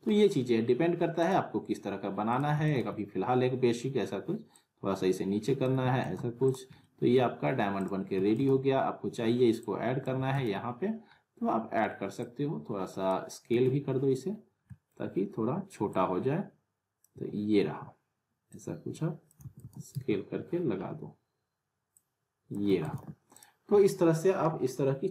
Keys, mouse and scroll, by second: 1.2 click, 2.5 alt+w, 2.7 alt+right click, 2.7 alt+w, 3.4-4.5 scroll up 1, 4.5-5.8 click, 5.8 w, 6.4 click, 6.8 alt+middle click, 6.8-7.4 alt+middle click, 7.8 click, 8.2 alt+w, 8.3 alt+right click, 8.8-9.6 scroll down 1, 9.6-10.2 click, 10.1 alt+w, 10.3 alt+right click, 10.8-12.1 scroll down 1, 12.2-13.1 drag, 13.5 z, 13.9-14.4 scroll down 1, 14.7 middle click, 15.0 r, 15.9-17.2 click, 17.1 w, 18.5-19.4 click, 19.4 alt+w, 19.6 alt+right click, 19.6 alt+w, 19.9 z, 20.4 scroll down 1, 21.9-22.5 click, 22.7 w, 22.8 right click, 23.4 click, 24.8-25.1 alt+middle drag.